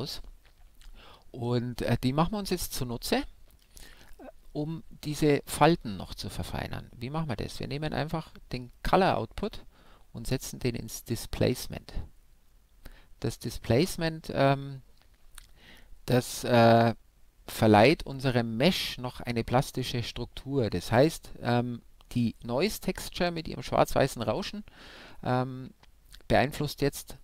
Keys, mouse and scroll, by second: 1.7-2.8 scroll up 1, 2.8-4.5 middle drag, 8.7-10.4 drag.